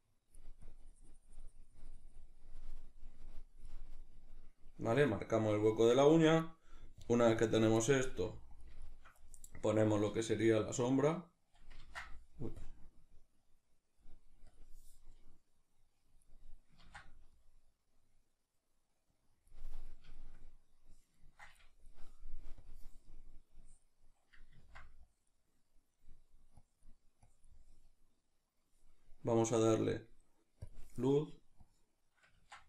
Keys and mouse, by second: 4.1-8.1 middle drag, 8.1 f, 8.6 click, 8.8-10.8 shift+middle drag, 10.8-20.2 drag, 11.8 ctrl+z, 16.9 ctrl+z, 20.2-22.7 shift+middle drag, 22.7-26.0 drag, 24.7 ctrl+z, 26.0 middle click, 26.7-32.6 drag, 32.4 ctrl+z.